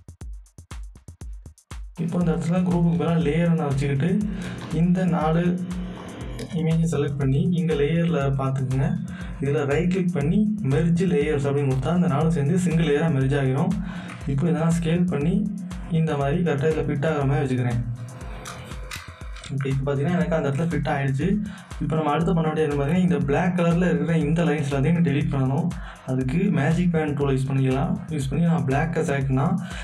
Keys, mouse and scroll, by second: 0.8-2.3 alt+shift+drag, 3.4 click, 9.7 right click, 11.4 click, 13.9-19.2 drag, 19.3 Return, 23.1 Return, 23.4 alt+scroll up 1, 27.4 alt+scroll up 1, 27.4 click.